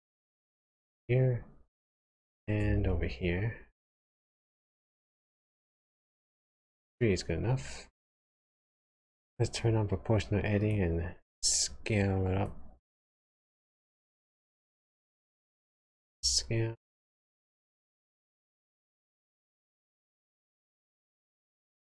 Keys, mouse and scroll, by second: 2.8 ctrl+r, 8.3 click, 10.6 click, 12.3 click, 13.7 alt+click, 15.9 s.